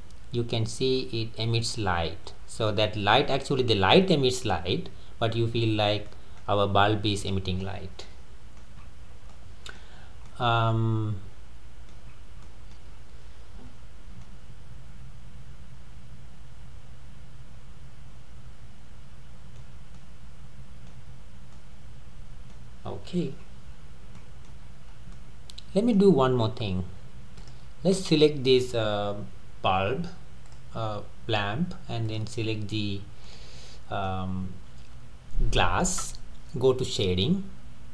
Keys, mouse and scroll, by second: 1.2-1.8 scroll up 1, 1.8-4.9 middle drag, 5.5 scroll down 3, 6.1-7.2 middle drag, 7.2 click, 7.6-8.8 middle drag, 8.8-9.4 scroll up 3, 9.4-10.0 middle drag, 10.0-10.3 scroll down 2, 10.3-12.3 middle drag, 12.1 scroll up 2, 12.5-12.9 middle drag, 12.9 scroll down 3, 14.3-17.2 middle drag, 20.0-23.4 middle drag, 23.4-24.1 scroll up 5, 24.1-24.7 middle drag, 24.7-25.1 scroll down 6, 25.1-26.4 middle drag, 26.4-27.2 scroll up 6, 27.4 click, 27.9 scroll down 3, 29.8 Tab, 30.5 click, 32.1 drag, 33.3-36.3 middle drag.